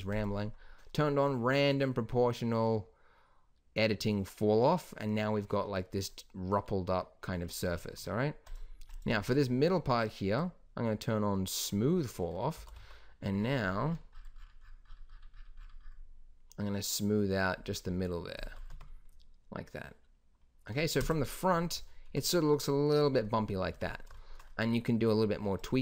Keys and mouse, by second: 4.7-6.2 middle drag, 8.4-12.3 drag, 12.5 s, 18.6 Tab, 20.9 KP_0, 23.6 Tab.